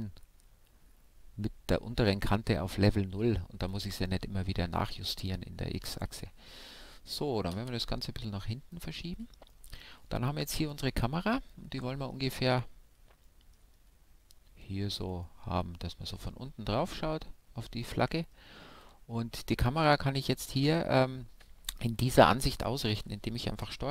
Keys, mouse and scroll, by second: 0.2-1.9 right drag, 1.3-4.4 middle drag, 3.9 g, 5.3-7.1 drag, 5.5-13.7 middle drag, 7.2-8.8 right drag, 14.3-21.9 middle drag.